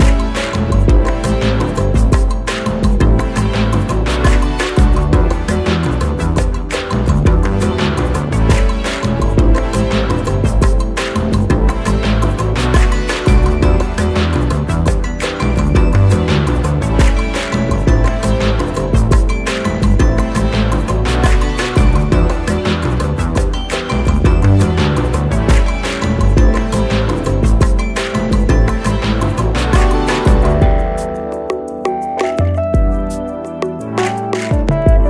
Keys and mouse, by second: 20.4-21.1 drag, 32.3-34.0 drag.